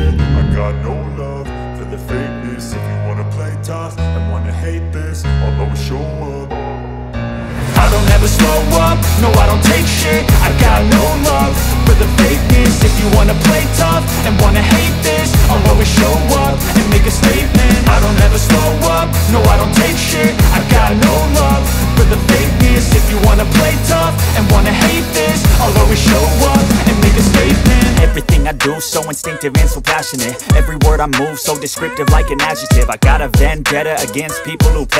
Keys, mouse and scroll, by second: 8.2 space, 8.4 click, 8.7 space, 10.5-23.8 drag, 23.8 space, 23.9 click, 25.7-30.1 drag, 30.1 space, 30.2 click, 30.3 space, 30.9-32.7 drag.